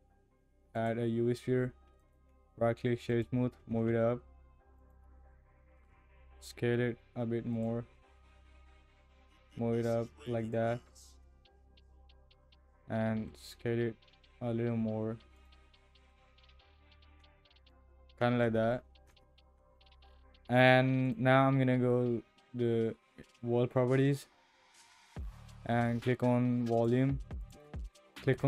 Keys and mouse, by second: 2.0 click, 3.6 g, 5.4-5.8 shift+middle drag, 6.2 s, 8.4 g, 11.2 KP_0, 13.1 s, 15.8 drag, 16.8 g, 18.2 KP_0, 18.9 KP_0, 19.1 KP_0, 21.0 click, 26.8 click, 27.6-28.4 drag.